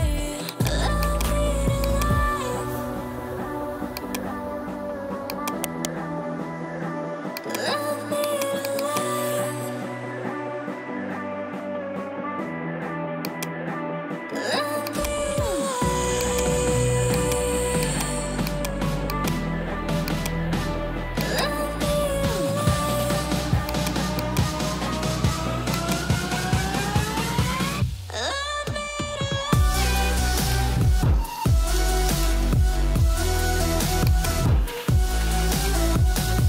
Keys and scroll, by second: 3.2 ctrl+j, 9.8-11.9 typing.